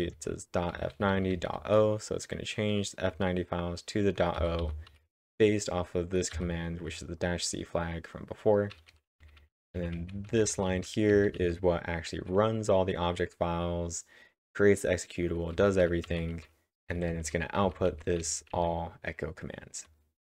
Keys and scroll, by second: 3.1 j, 4.1-4.9 typing, 6.3 w, 8.5-11.9 typing, 15.6-17.1 typing, 18.3-19.3 typing.